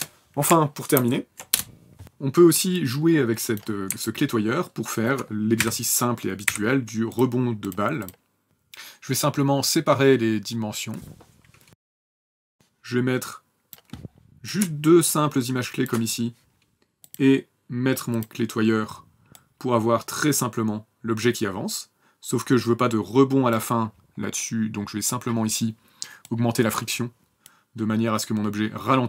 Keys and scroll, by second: 5.4 shift+v, 6.3 y, 8.4 p.